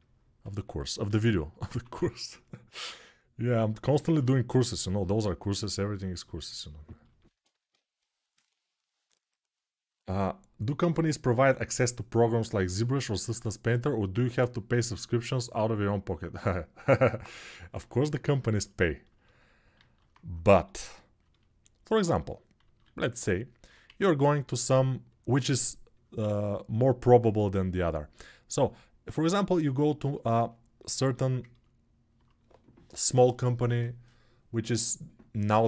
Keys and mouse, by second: 0.9 alt+q, 1.4 1, 19.6 alt+q, 22.5 alt+q, 23.6 1.